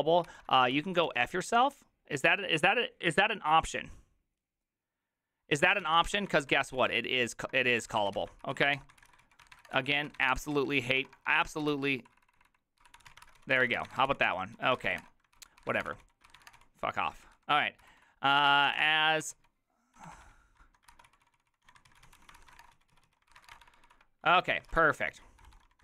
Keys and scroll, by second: 0.0-1.6 typing, 5.6-19.8 typing, 17.1 ctrl+c, 17.3 ctrl+c, 20.0 ctrl+d, 20.9 ctrl+c, 20.9-25.8 typing, 24.4 ctrl+d, 24.7 ctrl+u.